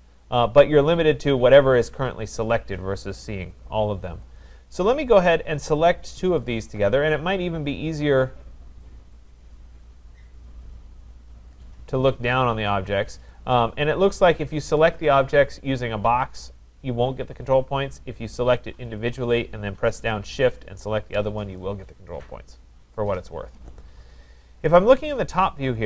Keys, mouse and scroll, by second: 0.0 click, 1.1 click, 2.0 click, 4.4 click, 6.4 click, 8.0 click, 8.2 click, 9.4 click, 9.7-11.4 scroll, 11.6 click, 13.4 click, 14.1 click, 16.2 click, 17.6 click, 19.0 click.